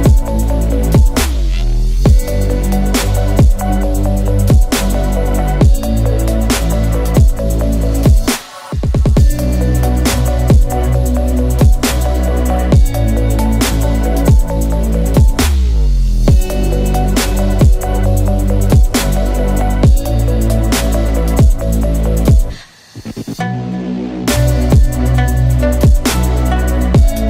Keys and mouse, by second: 0.5-0.9 shift+drag, 1.0 shift+s, 3.0 KP_1, 3.8 ctrl+KP_1, 5.3 z, 5.8-6.5 drag, 6.3 z, 8.0 ctrl+KP_1, 9.3 e, 11.0-11.8 drag, 13.0 s, 15.3 e, 15.9 space, 18.1 ctrl+z, 18.8 m, 25.0-26.3 drag, 27.1-27.2 drag.